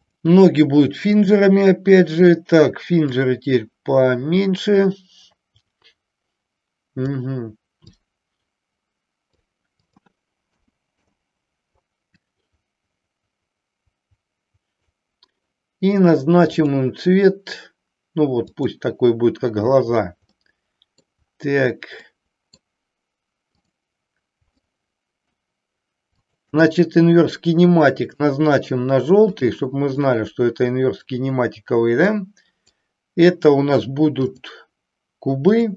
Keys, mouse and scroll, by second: 3.1-7.1 drag, 7.9-9.3 drag, 9.7-11.3 drag, 12.2-15.1 drag, 16.5 click, 18.4 click, 20.3-21.0 middle drag, 22.0-22.5 middle drag, 23.5-23.9 drag, 24.5-25.4 shift+middle drag, 26.0 shift+click, 28.0 click, 29.2 click, 30.0-31.0 middle drag, 32.0 click, 34.3-35.7 drag.